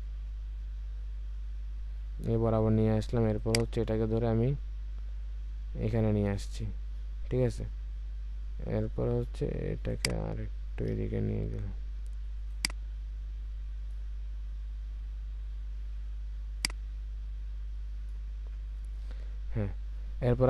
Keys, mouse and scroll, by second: 19.1-19.5 alt+scroll down 1.